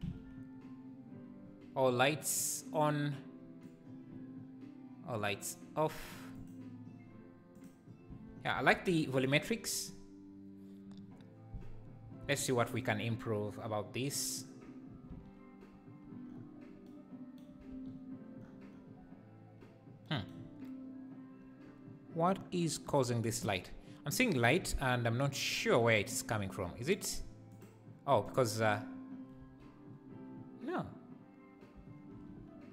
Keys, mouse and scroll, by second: 0.1 alt+h, 3.7-6.5 drag, 7.7 click, 27.6 click, 28.3 click, 29.5 h, 32.2 alt+h.